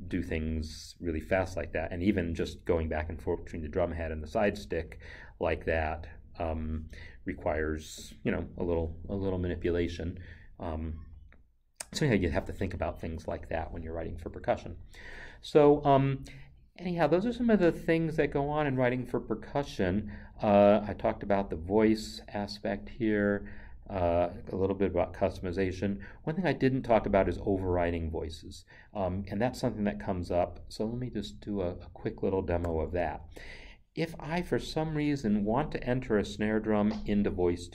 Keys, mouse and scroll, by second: 31.8 click, 32.6 n, 36.7 click.